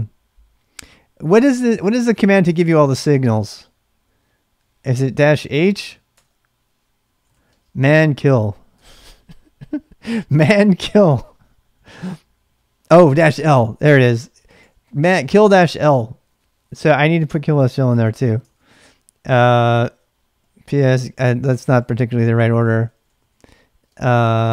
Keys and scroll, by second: 1.8 BackSpace, 4.7-5.0 typing, 6.1 Return, 7.0-9.0 typing, 13.0-14.8 typing, 13.4 ctrl+[, 15.5 Return, 17.5 ctrl+a, 17.6 ctrl+a, 18.3-24.5 typing.